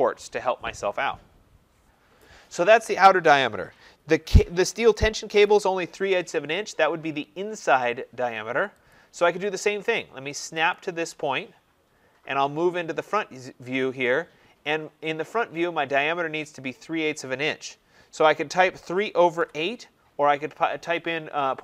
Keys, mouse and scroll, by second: 8.8 click, 10.6 click, 18.5-19.8 typing.